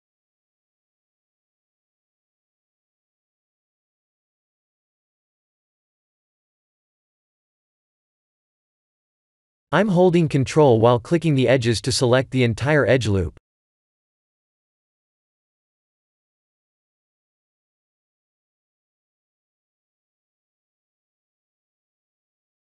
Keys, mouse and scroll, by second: 0.0-0.7 scroll up 3, 0.7 shift+middle click, 0.9 shift+middle click, 1.5 1, 4.6 middle click, 4.7 middle click, 5.4 2, 6.1 alt+click, 7.9 middle click, 8.8 shift+middle click, 9.5 middle click, 11.2 ctrl+click, 12.5 ctrl+click, 13.0 middle click, 15.3-15.9 scroll up 2, 17.1 ctrl+click, 19.0-20.1 scroll down 7, 21.0 click, 22.0 shift+middle click.